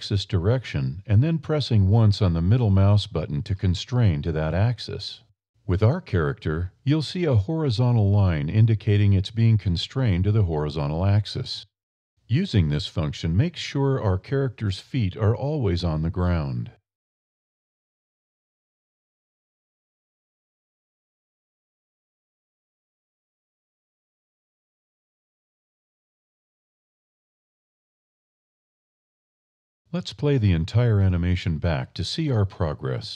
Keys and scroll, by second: 2.5 Up, 2.7 a, 3.1 g, 5.6 Up, 5.9 a, 6.6 g, 8.3 g, 9.0 g, 9.7 Up, 10.2 a, 10.7 g, 12.7 Up, 13.0 a, 13.4 g, 15.0 Up, 15.6 a, 15.9 g, 17.9 Up, 18.2 a, 18.7 g, 21.7 Up, 22.1 a, 23.1 g, 26.8 Up, 27.3 a, 27.8 g, 30.7 a.